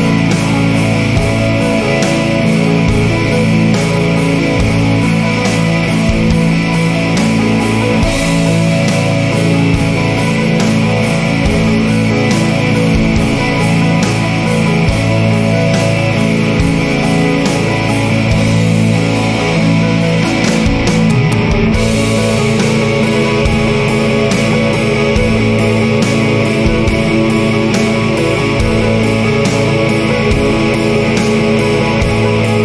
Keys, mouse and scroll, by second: 0.3 click, 1.6 click, 3.1 click, 4.2 click, 5.8 click, 7.0-8.7 drag, 9.7 click, 10.7 click, 12.5 BackSpace, 15.2 5, 18.1 BackSpace, 18.6 4, 19.0 5, 21.6 click, 22.4 click, 23.6 BackSpace, 26.0 BackSpace, 28.2 BackSpace, 30.3 shift+8, 31.4-32.3 typing.